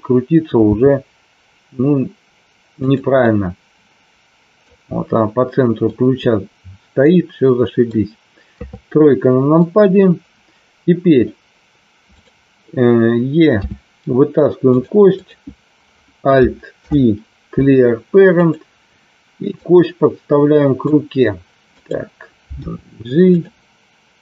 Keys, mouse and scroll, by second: 0.7 r, 2.7 click, 3.2-4.6 middle drag, 5.8-8.0 middle drag, 8.5 KP_3, 12.1 click, 13.4 e, 14.6 click, 15.1 click, 16.7 alt+p, 19.5-20.8 drag, 22.6 g, 23.2 click.